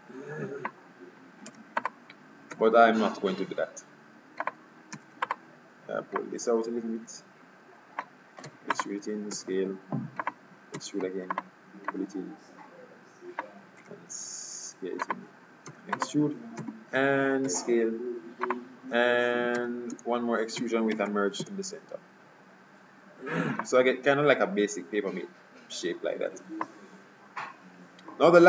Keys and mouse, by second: 1.6 e, 2.6 s, 5.0 e, 6.3-8.1 drag, 8.6 e, 9.4 s, 10.9 e, 12.0 click, 14.0 s, 15.8 e, 17.5 s, 19.7 e, 21.0 alt+m, 23.7-24.7 drag, 24.8 middle click.